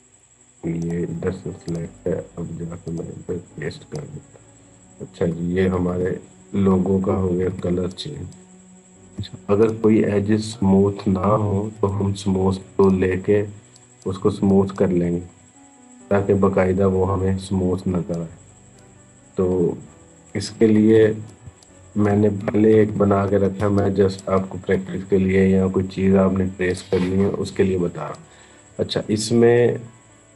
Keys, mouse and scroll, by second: 0.6 right click, 1.5 click, 4.1-4.5 scroll down 1, 7.0 ctrl+=, 7.9 space, 8.1 click, 8.4 space, 9.4 click, 9.7-11.6 scroll down 1, 11.6 right click, 12.6 click, 14.9-17.4 scroll up 1, 17.9 click, 19.0-19.6 scroll down 1, 20.6 ctrl+-, 21.2 space, 21.4 click, 21.7 space, 22.5 ctrl+=, 23.4 space, 23.6 click, 23.7 click, 23.8 space, 26.5 click.